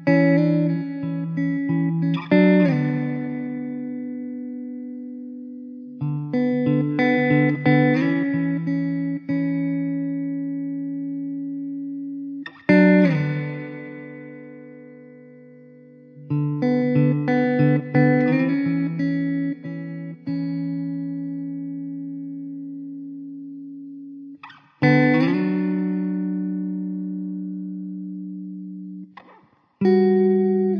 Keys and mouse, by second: 8.2 alt+w, 9.1 alt+middle click, 10.7 alt+q, 12.7 alt+middle click, 14.4 4, 20.3 alt+middle click, 22.1 alt+middle click, 23.8 alt+w, 26.4 middle click, 27.3 1, 29.4 ctrl+Delete, 30.1 middle click.